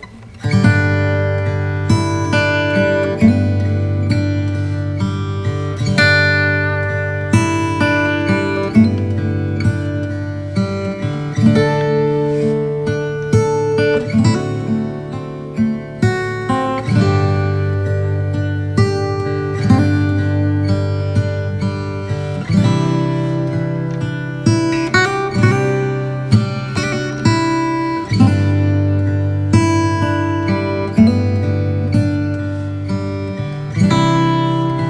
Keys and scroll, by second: 24.4 b, 25.4 x, 27.5 x, 28.5 x, 29.0 0, 30.9 x, 31.9 space, 33.0-34.6 typing.